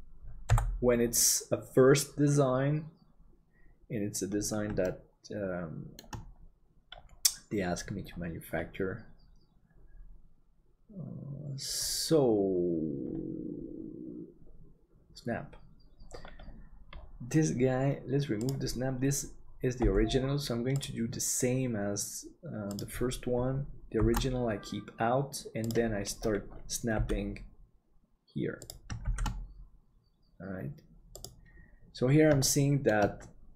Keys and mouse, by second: 0.4 n, 4.8-5.9 shift+middle drag, 19.8 g, 24.0 shift+d, 26.9 g, 29.1 shift+d, 32.5 shift+middle click.